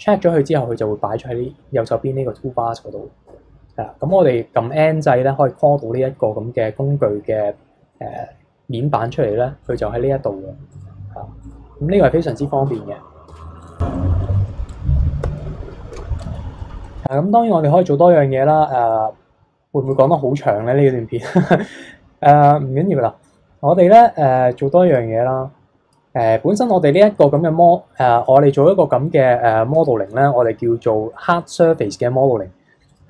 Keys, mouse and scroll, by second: 3.2 n, 4.1 n, 9.6 click, 10.7 click, 11.4 click, 12.7 Tab, 13.2 Tab, 13.6 click, 13.8 scroll down 1, 13.9-14.7 middle drag, 14.7 click, 15.2 n, 15.9 alt+h, 16.2 click, 16.4 scroll up 2, 16.6-17.0 middle drag, 17.0 click, 17.7-19.8 middle drag, 19.8-22.8 drag, 24.9-27.0 drag, 27.3-28.0 middle drag, 28.0-28.6 scroll down 2, 28.6-30.4 middle drag, 30.4-31.1 scroll up 1, 31.1 middle click, 32.0-32.8 scroll up 1, 32.8 click.